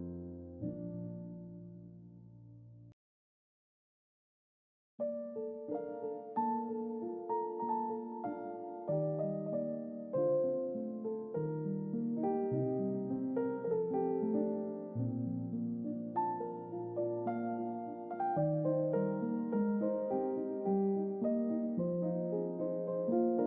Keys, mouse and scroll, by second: 8.9 click, 10.1-14.6 drag, 15.2 click, 17.1 click, 17.7-19.2 drag, 19.9 click, 21.3-23.4 drag.